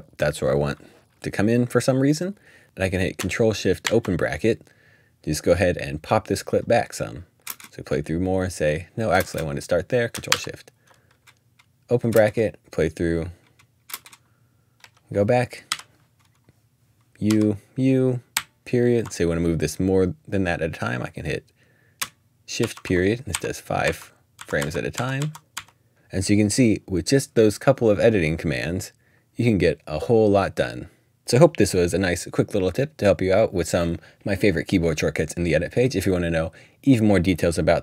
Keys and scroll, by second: 3.8 ctrl+shift+[, 7.5 space, 9.1 space, 10.3 ctrl+shift+[, 12.6 space, 13.9 space, 14.8 Up, 15.5-19.1 typing, 22.6-26.1 typing.